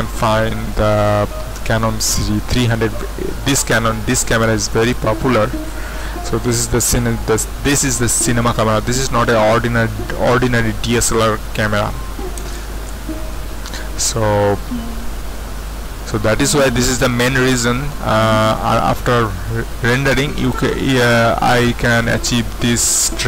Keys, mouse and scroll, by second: 4.8 click, 12.1 KP_5, 12.4 KP_0, 12.9 Return, 20.4 click.